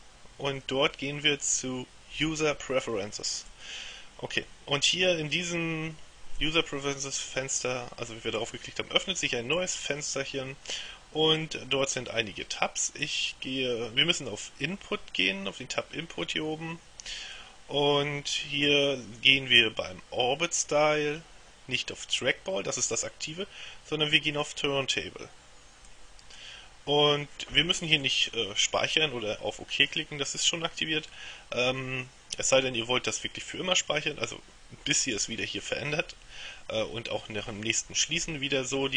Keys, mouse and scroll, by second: 3.6 click, 6.5-8.0 drag, 17.2 click, 26.0 click.